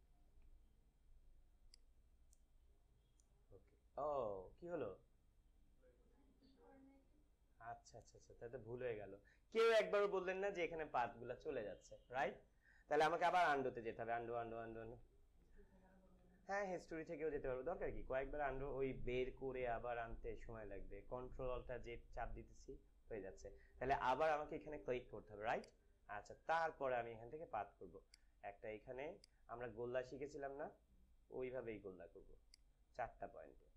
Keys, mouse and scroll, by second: 0.4 ctrl+z, 1.6-6.0 drag, 13.6 ctrl+z, 15.9 ctrl+alt+z, 25.5 click, 27.9-33.7 drag.